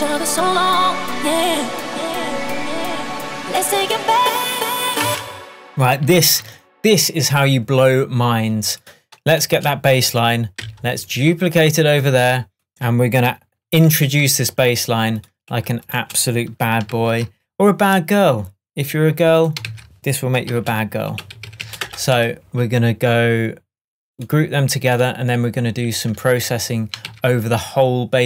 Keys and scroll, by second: 5.1 space, 17.3 super+g, 19.8 super+r, 20.5 shift+super+r, 20.9 shift+b, 22.9 Return, 27.2 super+s.